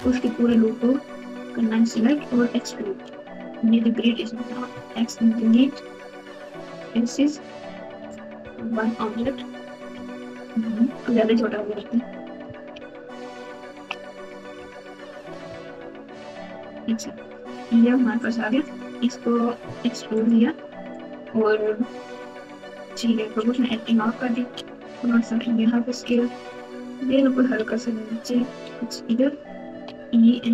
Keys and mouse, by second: 4.7 x, 7.8 1, 9.1 KP_1, 9.9-10.5 KP_Subtract, 11.1-11.6 KP_Subtract, 12.7-13.8 ctrl+KP_2, 14.5-15.1 KP_Add, 15.4 KP_Add, 15.6 KP_Add, 16.0 KP_Add, 16.1 KP_Add, 18.3 click, 19.6 e, 23.4 o, 24.5 s, 27.0 g, 29.6 e.